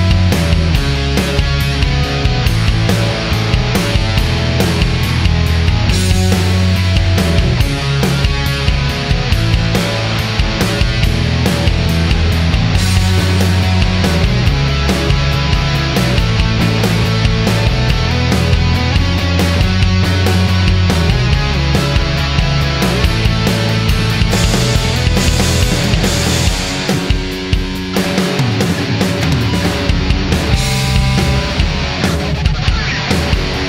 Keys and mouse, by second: 0.0 n, 6.4 click, 7.4-11.5 drag, 13.4-14.4 middle drag, 15.5-16.2 middle drag, 19.8 click, 21.1 shift+d.